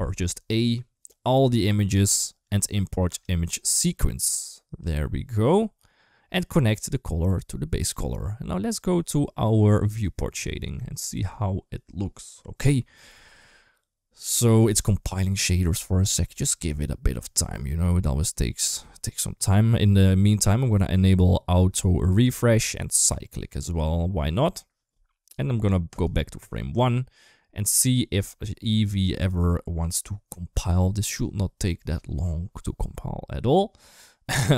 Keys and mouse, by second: 5.3-6.7 drag, 10.0 click, 17.8 middle click, 19.9 middle click, 21.9 click, 23.1 click, 25.6 click, 27.0 middle click, 29.2 shift+middle click, 29.8 middle click.